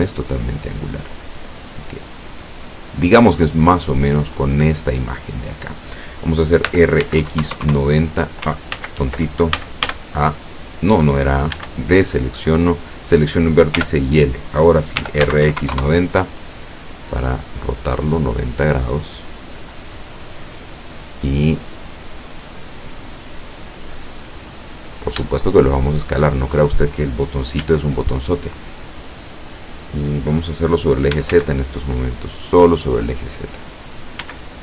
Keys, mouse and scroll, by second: 2.2 click, 2.5-3.0 scroll down 2, 3.5 scroll down 2, 3.8-4.7 scroll up 3, 4.7 scroll down 2, 6.8 r, 7.1 x, 7.3 KP_9, 7.5 KP_0, 7.8 KP_Enter, 8.8 ctrl+z, 9.7 ctrl+a, 11.7 a, 12.9 right click, 13.8 l, 15.1 r, 15.3 x, 15.6 KP_9, 15.7 KP_0, 15.8 KP_Enter, 16.8-18.6 middle drag, 19.7-22.6 drag, 22.6-23.1 scroll down 1, 23.3-24.6 middle drag, 24.7-25.2 scroll up 1, 25.5-26.7 shift+middle drag, 27.7 s, 29.4 click, 31.2 s, 31.4 z, 33.5 click, 34.3 s.